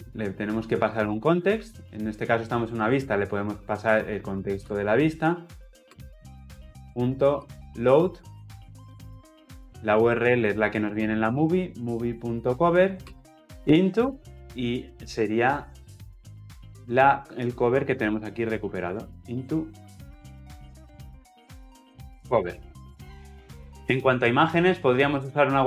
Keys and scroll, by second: 0.1 ctrl+o, 1.3 ctrl+p, 2.6 Escape, 5.7 Return, 13.4 Insert, 13.9 Return, 20.2 ctrl+z.